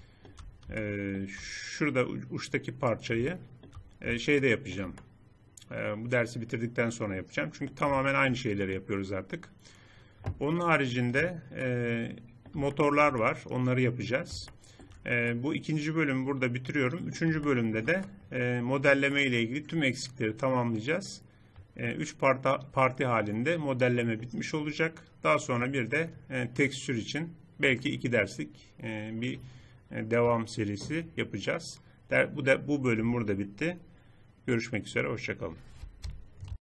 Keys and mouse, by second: 10.1-13.4 middle drag, 13.5 middle click, 15.6-17.0 middle drag, 17.2-20.8 drag.